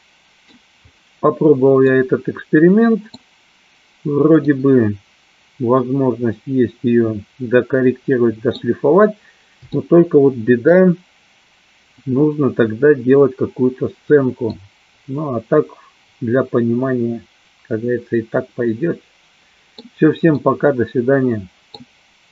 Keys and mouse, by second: 2.0-3.3 middle drag, 4.6-8.7 middle drag, 9.9-10.9 shift+middle drag, 14.7-19.9 middle drag, 20.4-21.9 middle drag.